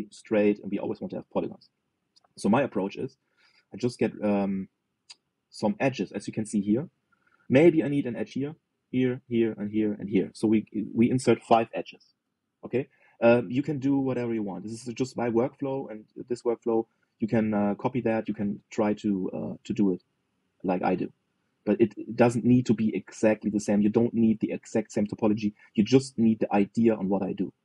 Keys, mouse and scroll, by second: 1.8-5.3 middle drag, 6.5-9.7 middle drag, 14.8-27.6 shift+middle drag.